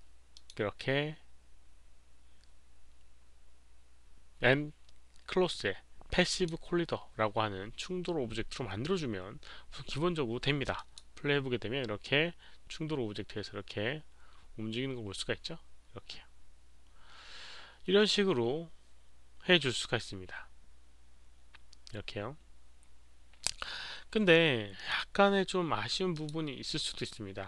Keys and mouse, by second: 0.3 click, 6.3 click, 10.7 click, 24.8 click, 26.1 click.